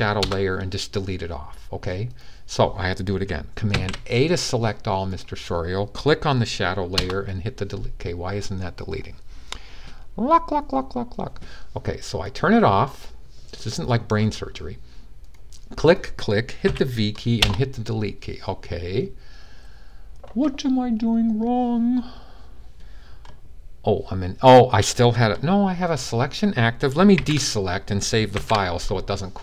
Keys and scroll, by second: 3.5 super+a, 16.4 v, 26.9 super+d, 28.1 super+s.